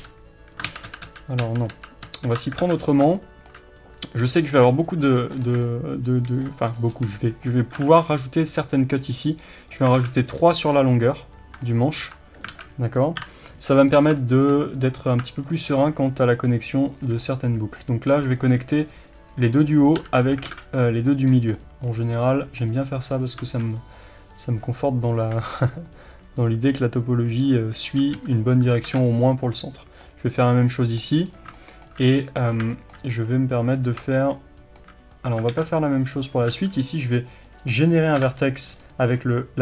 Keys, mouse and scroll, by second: 0.0 f, 0.7 ctrl+z, 2.6 alt+a, 2.8-3.2 scroll down 1, 3.2-9.7 shift+middle drag, 4.5-4.8 scroll down 1, 5.3-5.7 scroll down 1, 6.7 scroll up 1, 7.8 ctrl+r, 9.7 click, 10.0 alt+a, 10.3 scroll down 1, 11.5 Tab, 11.7-15.1 middle drag, 12.0 Tab, 12.5 alt+a, 13.2 KP_7, 13.8 scroll up 1, 15.1 click, 17.3-24.7 middle drag, 20.0 f, 20.5 alt+a, 20.7 scroll down 1, 21.3-21.6 scroll up 1, 23.2-24.0 scroll down 1, 24.0-24.7 scroll up 1, 24.7 click, 28.2 f, 28.9 alt+a, 29.0 scroll down 1, 29.2-33.7 middle drag, 31.3 scroll up 1, 32.5 scroll down 1, 33.1-33.7 scroll up 2, 33.7 click, 34.2-35.8 shift+middle drag, 35.5 alt+a, 35.8 click, 36.5 f, 38.2 KP_7, 38.8 scroll up 1.